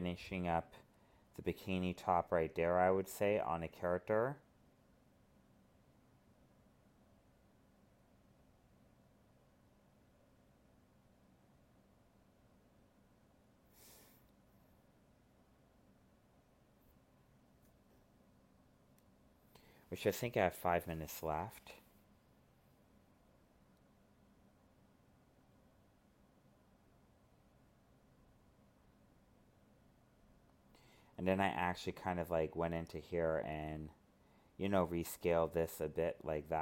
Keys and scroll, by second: 2.9 alt+space, 5.2 alt+space, 10.4 alt+space, 12.3 alt+space, 13.5 alt+space, 15.3 alt+space, 16.8 alt+space, 18.1 alt+space.